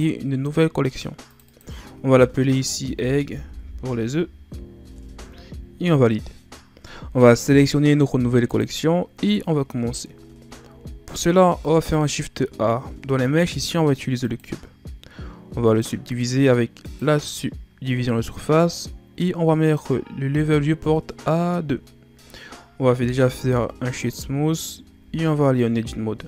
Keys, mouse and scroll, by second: 1.3 click, 1.5-3.4 drag, 3.4 g, 8.5 click, 9.4-10.4 scroll down 1, 10.4-10.9 scroll down 1, 10.9-11.8 scroll up 3, 11.8 shift+a, 15.7-18.7 drag, 19.6-22.7 drag, 23.2 w, 25.0 Tab, 25.7-26.2 scroll down 1.